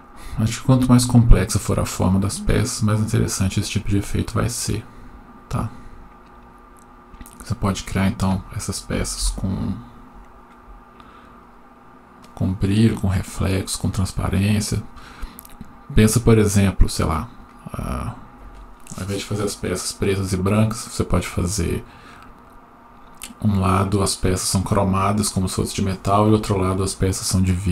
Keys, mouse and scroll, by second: 11.6 F12.